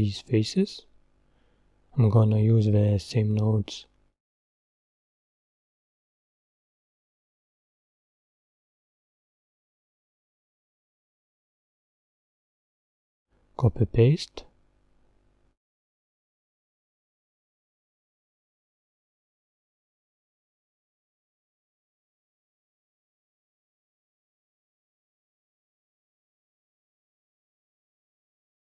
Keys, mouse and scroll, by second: 2.2 scroll down 3, 3.2 click, 3.6 scroll down 3, 4.8 Tab, 5.4-6.6 middle drag, 6.6-7.1 scroll up 4, 7.1-9.1 middle drag, 9.1 Tab, 14.0 middle click, 15.1 click, 18.6 click, 20.4 Delete, 22.5 click, 22.7-24.9 right drag, 24.9 click.